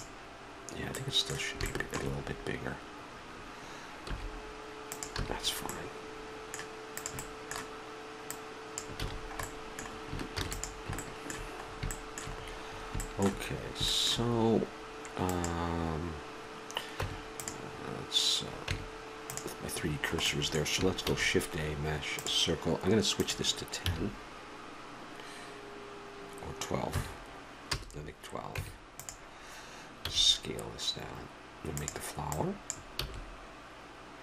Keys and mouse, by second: 0.9-3.1 middle drag, 4.1 s, 5.2 a, 6.9-10.1 middle drag, 9.0 a, 10.3 ctrl+s, 15.3-16.9 right drag, 17.0 Tab, 19.8-21.0 middle drag, 21.0 shift+a, 23.2-25.1 drag, 28.5 Tab, 30.0 s, 32.3-34.2 drag, 33.0 s.